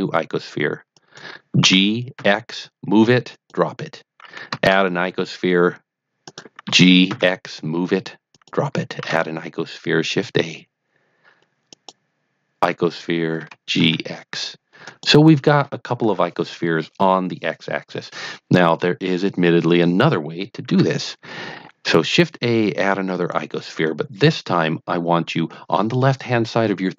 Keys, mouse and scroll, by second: 0.9 click, 1.6 g, 2.1 x, 3.3 click, 4.6 shift+a, 6.2 click, 6.6 g, 7.0 x, 7.2 g, 8.3 click, 9.0 shift+a, 11.6 click, 13.3 g, 13.7 x, 14.8 click, 20.6 shift+a, 23.1 click.